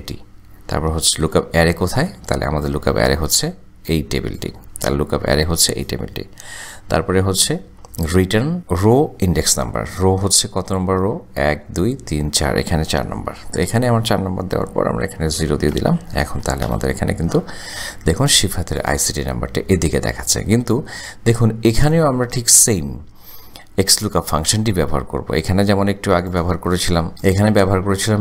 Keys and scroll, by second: 1.6 ,, 7.6 ,, 13.7 KP_4, 14.6 ,, 16.3 shift+0, 16.7 shift+Return.